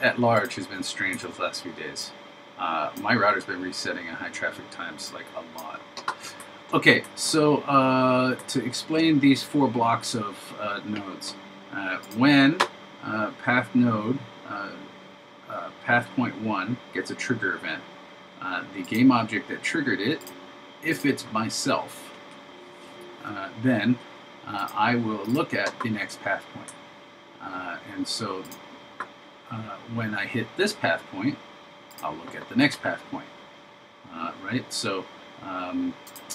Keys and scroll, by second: 1.2 super+v.